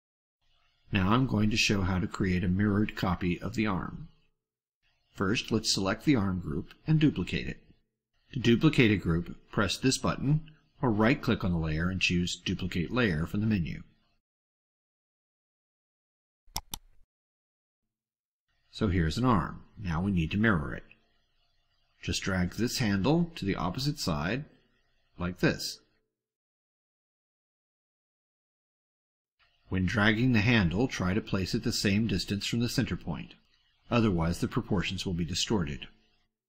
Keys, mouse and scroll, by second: 13.1 right click, 16.4 click, 17.6-18.2 drag, 19.9 ctrl+scroll up 2, 20.3-20.9 ctrl+middle drag, 21.0 ctrl+scroll up 1, 21.5 ctrl+middle click, 25.9-28.9 drag.